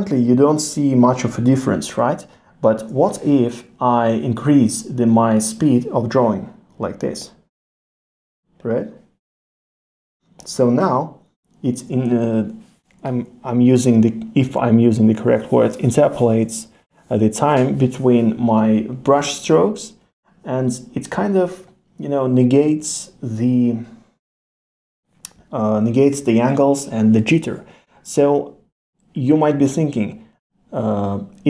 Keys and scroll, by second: 2.0 super+z, 16.7 super+z.